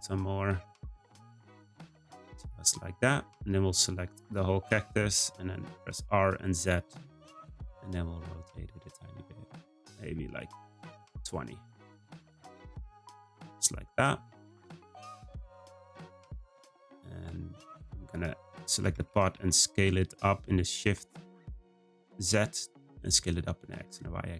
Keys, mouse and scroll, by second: 3.3 click, 5.8 r, 13.1 click, 17.7 click, 18.8 Tab, 19.1 a, 19.3 s.